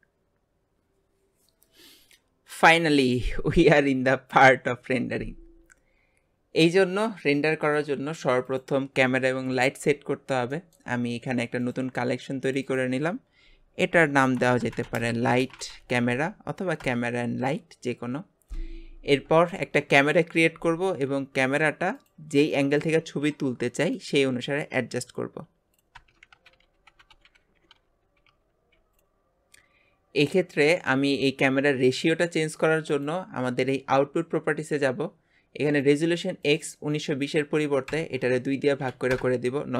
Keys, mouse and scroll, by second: 6.2 scroll down 4, 10.6-11.7 shift+middle drag, 11.7 click, 12.7-19.0 drag, 19.1 scroll down 1, 19.5-21.9 shift+middle drag, 21.9 click, 22.6-22.9 shift+middle drag, 22.9 shift+a, 26.0 KP_0.